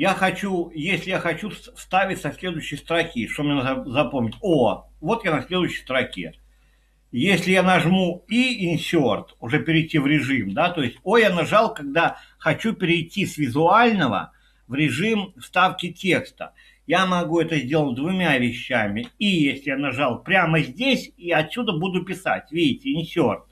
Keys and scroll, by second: 4.4 o, 6.1 Escape, 7.4 Up, 9.1 Right, 9.6 Right, 10.5 Right, 10.9 Right, 19.1 i.